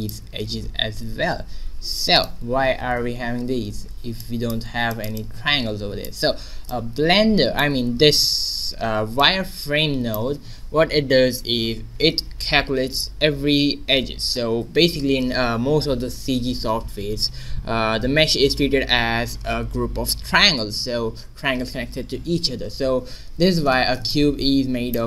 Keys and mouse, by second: 1.9 shift+z, 2.1 right click, 2.9 shift+h, 3.5 Tab, 4.6 a, 6.1 Tab, 9.1-11.1 drag, 14.6 shift+z, 24.1 middle click.